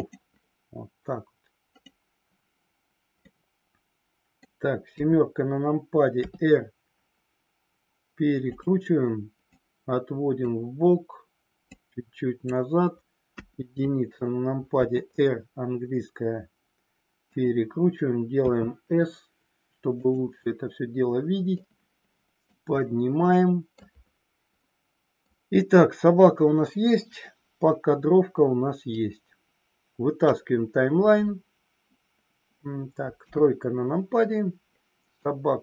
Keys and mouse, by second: 3.3-4.4 middle drag, 6.2 r, 8.4 click, 9.4-10.4 drag, 11.7 click, 14.8 r, 17.3 click, 18.4 s, 19.9 click, 21.6 click, 22.7-23.7 middle drag, 24.6 middle click, 28.8-30.3 drag, 33.1 KP_3, 35.2 click.